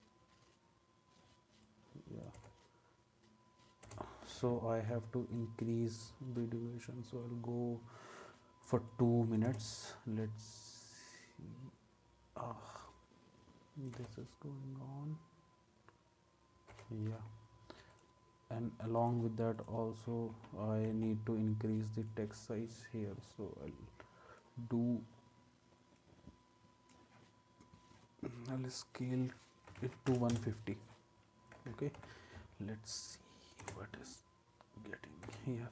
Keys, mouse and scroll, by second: 2.3 space, 3.9 space, 9.4 space, 13.9 space, 16.7 space, 20.9 s, 29.5-30.3 typing, 30.3 Return, 32.0 u, 33.6 space, 35.2 space.